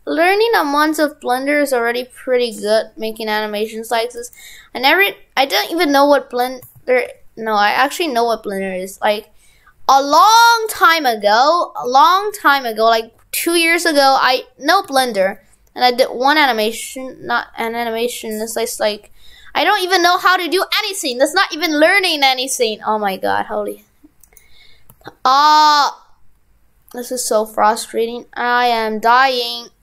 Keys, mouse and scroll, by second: 4.4 right click, 11.2 right click, 21.1 right click, 24.4 right click.